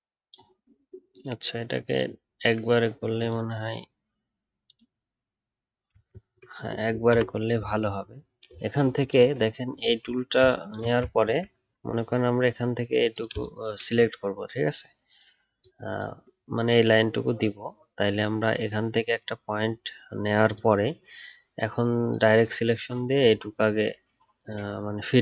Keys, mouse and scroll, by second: 11.2 alt+scroll up 2.